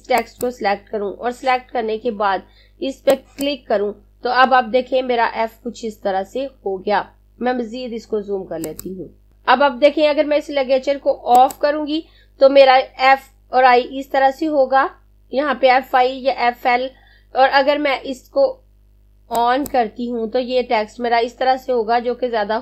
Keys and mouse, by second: 2.3 click, 19.0 click.